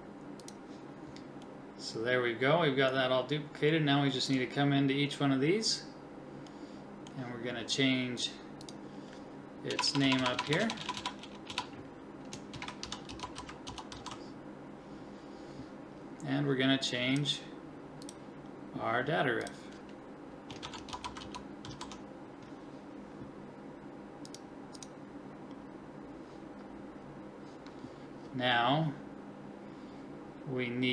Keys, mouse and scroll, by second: 9.9-11.5 typing.